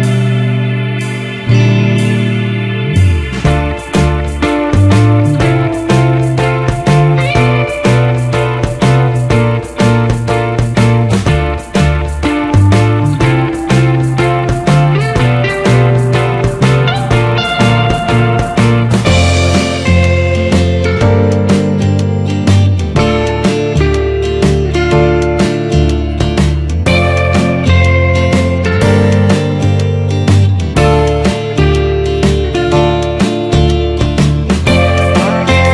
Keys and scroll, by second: 5.0 ctrl+z, 11.6 ctrl+z, 17.8 ctrl+z, 25.6 ctrl+z, 30.7 ctrl+space, 33.7 ctrl+z.